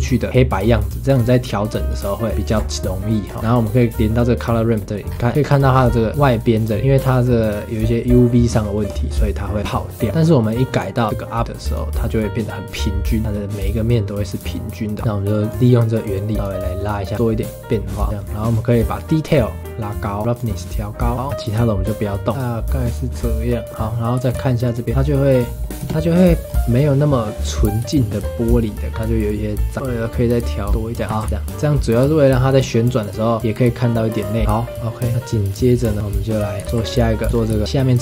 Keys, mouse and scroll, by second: 1.0 ctrl+shift+click, 1.9 ctrl+shift+click, 2.8-3.2 middle drag, 3.2-3.6 scroll up 3, 3.6-5.3 middle drag, 5.1-5.8 scroll up 11, 6.1-11.4 middle drag, 11.4 click, 12.2-15.5 middle drag, 15.5-18.1 drag, 18.1-19.4 middle drag, 19.4-21.5 drag, 22.1-23.1 middle drag, 23.1-23.4 scroll down 4, 23.4-24.6 middle drag, 24.6 ctrl+shift+click, 24.9 middle click, 25.8 KP_0, 26.4 scroll up 4, 27.9-29.7 shift+middle drag, 29.7 click, 31.0 scroll down 5, 31.1 ctrl+s, 31.3 space, 33.4 click, 35.9 click, 36.6 space, 36.6 ctrl+s, 37.3 shift+middle click, 37.3 scroll down 1, 37.6 click.